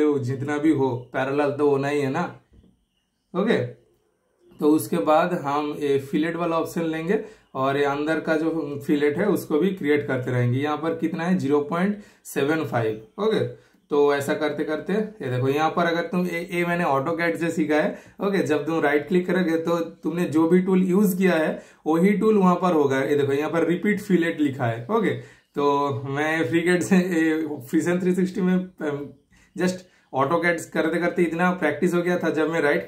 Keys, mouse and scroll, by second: 2.5 typing, 6.5 super+click, 11.8 super+click, 14.7 super+right click, 15.8 super+click, 16.5 super+click, 20.3 super+Return, 22.2 super+right click, 24.1 super+right click, 27.3 super+click, 29.1 super+click, 31.3 super+Return.